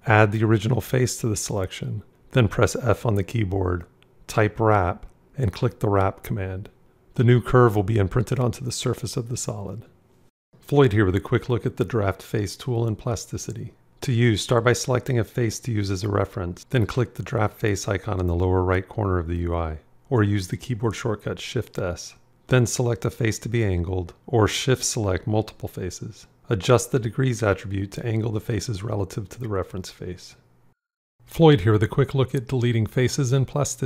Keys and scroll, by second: 2.0 f, 20.6 shift+s.